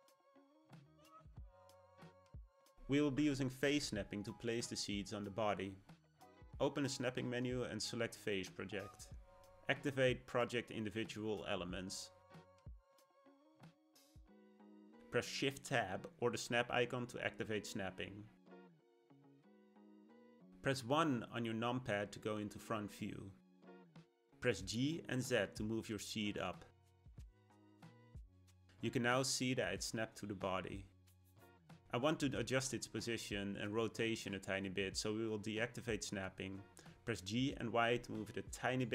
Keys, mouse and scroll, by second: 1.6-5.3 shift+middle drag, 6.7-9.9 drag, 18.7 shift+Tab, 20.8 KP_1, 21.8-23.4 scroll up 3, 23.4 g, 28.3-31.3 middle drag, 34.5 click, 35.6-37.5 shift+middle drag, 37.5 g.